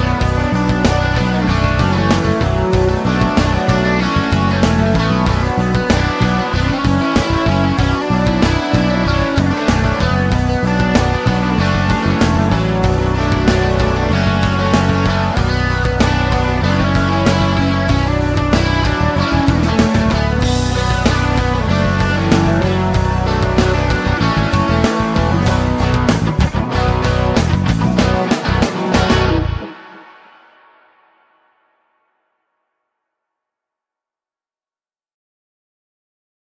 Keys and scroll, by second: 18.1-19.4 typing, 28.1-29.3 typing.